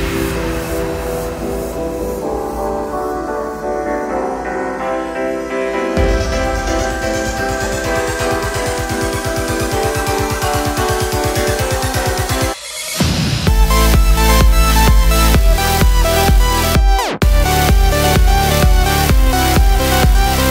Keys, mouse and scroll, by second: 0.3 click, 2.0 middle click, 2.3 alt+d, 2.8 click, 2.9 s, 3.2 click, 3.5-6.0 middle drag, 6.0 click, 6.1 Tab, 7.3 shift+Tab, 7.6 a, 8.3 click, 8.5 Tab, 9.9 KP_Enter, 10.4 g, 11.0 click, 11.1 Tab, 12.1 g, 12.3 click, 12.7 alt+d, 13.3 click, 13.7 middle click, 13.9 g, 14.5 click, 14.8 alt+d, 17.9 click, 18.0 g, 18.9 click, 19.6 alt+d, 20.3 click, 20.4 s.